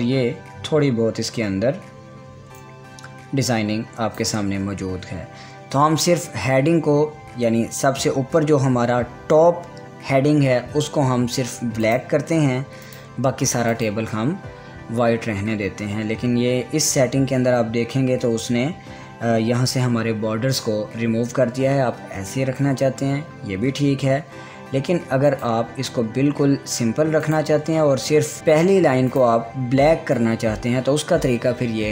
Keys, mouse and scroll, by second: 3.2-12.5 drag, 25.9 click, 25.9 click, 28.0 click, 28.4-28.7 scroll up 1, 29.1-31.9 drag.